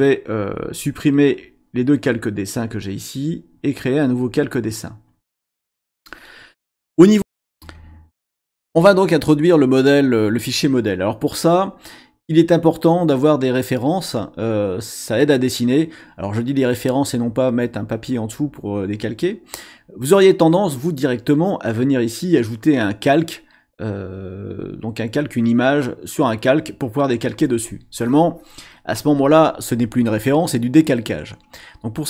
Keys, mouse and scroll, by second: 2.0 click, 2.7 click, 7.2 click.